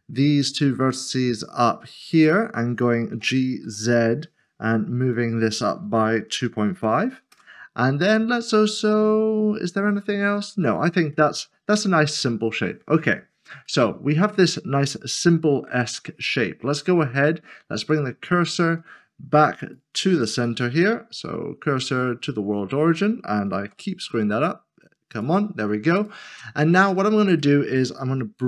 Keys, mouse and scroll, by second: 0.4 click, 0.8 typing, 1.4 click, 2.5 middle click, 3.7 typing, 6.3-6.7 typing, 7.3 Return, 8.8 middle click, 11.7 Tab, 13.0 click, 13.7 middle click, 17.9 click, 20.1 s, 22.3 s, 25.1 s, 26.4 middle click, 26.9 scroll down 1, 27.4 middle click.